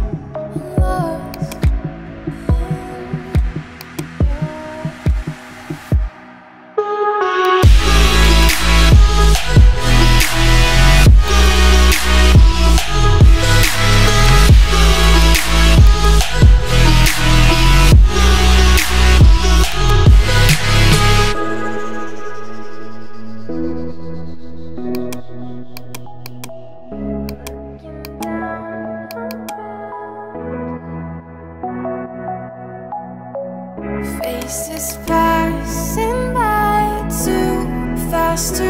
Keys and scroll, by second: 2.8 ], 3.4 [, 4.5 ], 6.5 [, 9.8 ], 13.4 [, 23.2 7, 23.9 5, 30.0-32.2 typing, 32.5 Return, 35.8-37.0 typing, 37.2 Return.